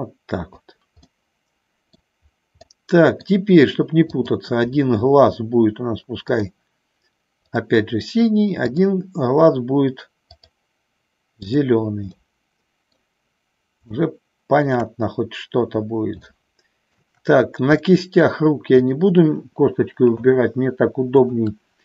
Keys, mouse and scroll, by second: 1.3 middle click, 2.7 middle click, 4.2 click, 6.4 click, 7.5 click, 10.4 click, 11.6 click, 12.3 middle click, 13.9 shift+middle click, 16.3 shift+middle click, 17.9 middle click, 18.8 click, 21.2-21.8 shift+drag.